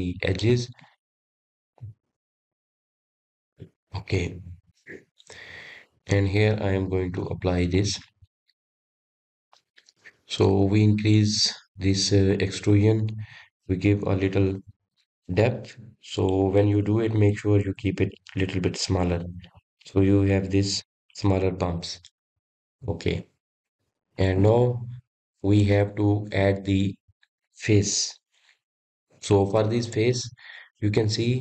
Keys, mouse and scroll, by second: 0.2-0.6 scroll up 2, 0.6-1.2 scroll down 1, 1.2-3.4 middle drag, 3.4-3.8 drag, 3.8 scroll down 1, 3.9-5.5 middle drag, 5.5 click, 8.6-9.8 drag, 9.8-15.6 middle drag, 17.0-29.4 middle drag.